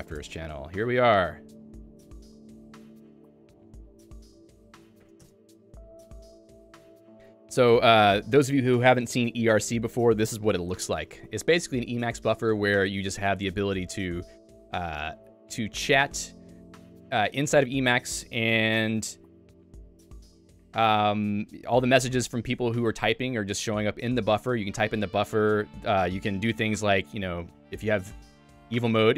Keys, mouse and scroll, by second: 0.6 Return, 1.8 click, 2.5 shift+h, 26.7 Escape, 27.3 Escape, 28.9 shift+v.